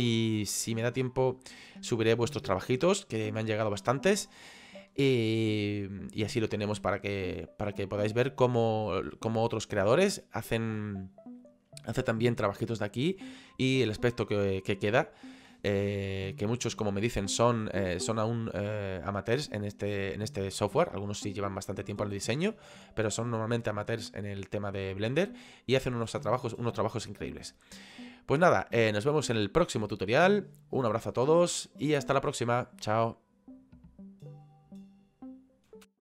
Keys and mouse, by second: 35.7 ctrl+5.